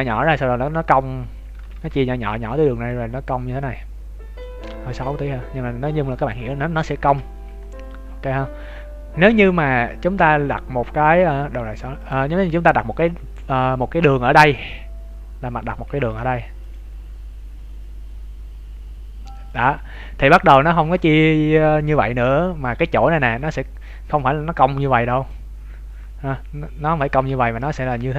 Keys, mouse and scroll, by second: 2.9 click, 4.4-5.0 d, 5.0 click, 6.3 d, 7.1 n, 7.5 scroll up 2, 8.3 scroll up 9, 11.9 click, 16.0 ctrl+r, 24.1 click, 25.3-27.4 d, 27.4 ctrl+z.